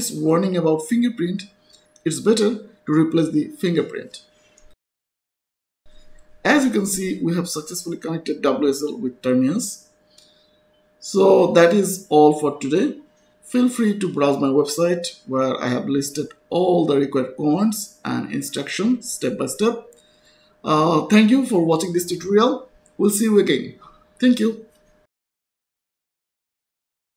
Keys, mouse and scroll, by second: 4.7 click, 6.1 click, 6.8 Return, 7.5-8.7 typing, 10.6 Return, 13.3 click, 16.3 click, 16.3-17.0 scroll down 1, 20.1-20.8 scroll up 1, 23.9-24.2 scroll up 1, 24.2-25.1 scroll down 1, 25.1-25.9 scroll up 1, 26.6 click.